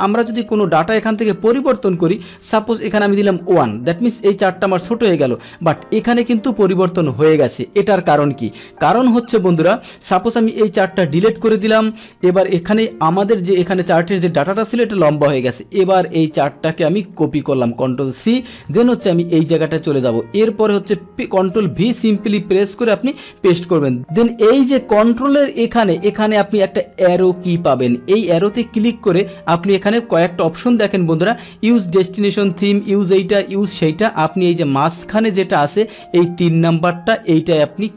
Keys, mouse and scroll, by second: 0.5 alt+Tab, 1.7 click, 2.5 click, 3.2 click, 4.9 alt+Tab, 9.5 click, 10.3 Delete, 11.0 alt+Tab, 12.3 ctrl+z, 14.6 click, 15.9 click, 17.3 ctrl+c, 18.7 alt+Tab, 21.3 ctrl+v, 23.0 click, 23.9 ctrl+v.